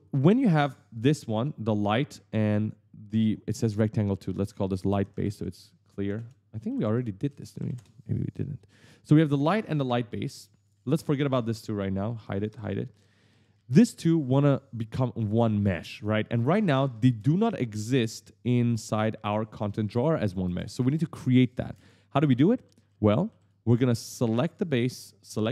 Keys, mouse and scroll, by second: 13.1-14.0 typing, 16.8 ctrl+space, 20.3 ctrl+space, 21.5 ctrl+space, 22.0 right click, 25.1 shift+click.